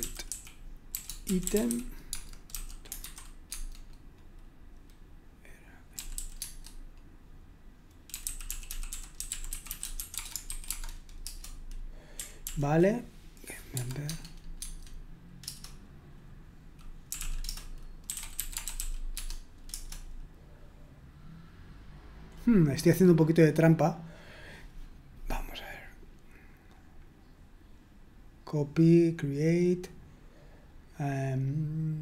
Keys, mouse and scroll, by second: 0.0-3.0 typing, 3.5 Tab, 5.9-6.6 typing, 8.2-10.9 typing, 11.2 Return, 12.4 ctrl+p, 13.7 typing, 14.0 Tab, 14.5 Tab, 15.4 Return, 17.2-19.6 typing, 25.7-27.4 scroll up 1, 28.0-28.7 scroll up 1, 30.9-31.8 scroll down 1.